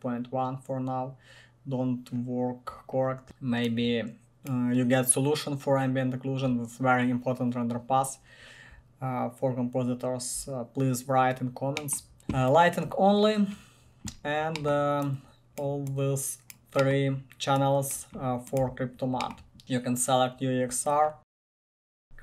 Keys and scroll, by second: 12.2 1, 18.8 1, 19.6 1, 21.3 Tab, 21.4-22.2 typing.